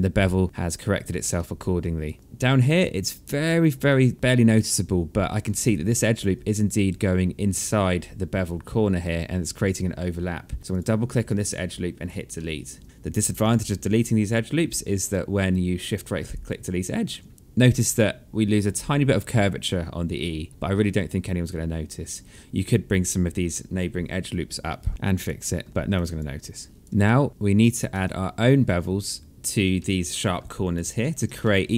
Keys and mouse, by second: 0.6 alt+middle click, 1.0 alt+click, 1.6 alt+middle click, 3.1 alt+right click, 4.9 alt+right click, 10.1 click, 10.7 alt+click, 11.6 alt+middle click, 14.8 shift+right click, 20.2 alt+click, 24.3 alt+click, 25.2 alt+middle click, 25.7 alt+click, 26.4 alt+middle click, 27.5 ctrl+s, 28.2 alt+click, 29.3 alt+middle click, 30.0 alt+click, 30.9 alt+middle click, 31.2 click.